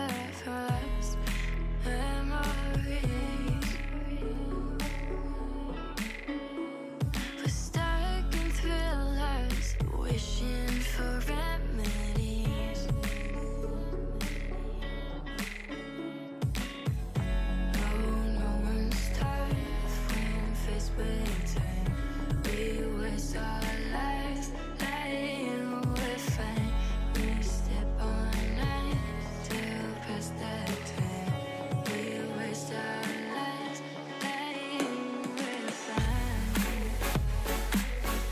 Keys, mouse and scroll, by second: 0.0 2, 0.2 middle click, 0.4 scroll up 2, 0.6-1.2 shift+middle drag, 1.2 2, 1.4 alt+click, 1.9 f, 2.1 middle click, 2.9 alt+click, 3.3 f, 3.5-4.6 middle drag, 4.6 alt+z, 4.8 3, 5.3 click, 5.6-7.3 middle drag, 7.3 shift+click, 7.8 x, 8.8 scroll down 1, 9.0 alt+z, 9.1-9.5 middle drag, 9.5 a, 10.5 m, 11.4-12.8 middle drag, 12.8 click, 13.2 Tab, 13.4 click, 13.7 click, 14.0 Tab, 14.3-15.7 drag, 14.3 middle click, 16.0-16.5 scroll down 2, 16.5 Tab, 18.2 click, 18.5 click, 18.7 click, 19.1 Left, 19.2 Left, 19.4 Left, 20.2 Left, 20.6 Left, 21.0 drag, 21.3-22.5 middle drag, 22.5 scroll up 2, 23.8 Tab, 23.9 middle click, 24.4-25.2 scroll up 1, 25.2 ctrl+r, 26.8 ctrl+r, 28.4 shift+click, 28.4 shift+middle click, 28.8 ctrl+b, 31.5 2, 32.2 alt+shift+click, 32.7 alt+click, 33.2 alt+shift+click, 33.8 alt+shift+click, 34.4 alt+shift+click, 34.7 scroll up 1, 34.9 ctrl+b, 36.3 click, 36.5 3, 36.9 click, 37.7 shift+click, 38.1 x.